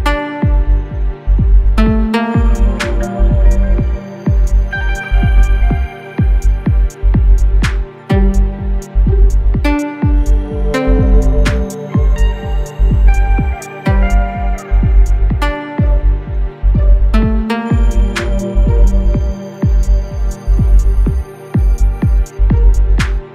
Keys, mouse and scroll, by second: 1.4 click, 6.3 right click, 7.3 click, 7.8 right click, 8.9 click, 15.6 click, 15.9 ctrl+z, 17.0-21.8 drag, 22.6-23.3 drag.